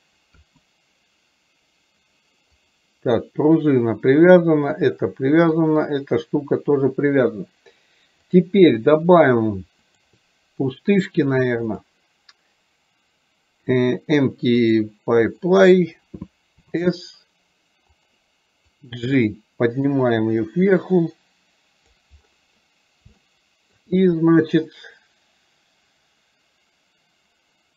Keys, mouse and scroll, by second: 2.7 click, 4.4 click, 5.7 click, 8.3 click, 10.1-10.9 drag, 11.7-14.9 drag, 18.7-22.1 drag, 23.3-23.9 shift+middle drag.